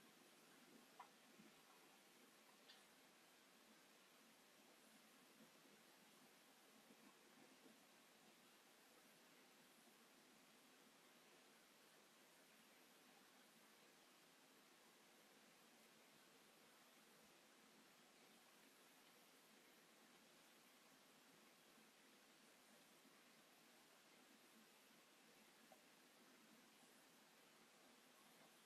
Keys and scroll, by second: 8.5 space, 13.1 shift+x, 15.1 space, 15.4 Escape, 21.9 m, 26.1 q.